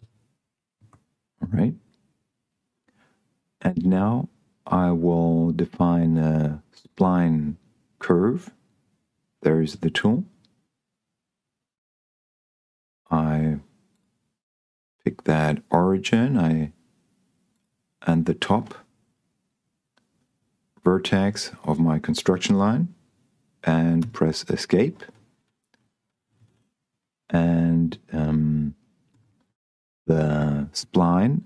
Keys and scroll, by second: 24.5 Escape, 29.4 Escape.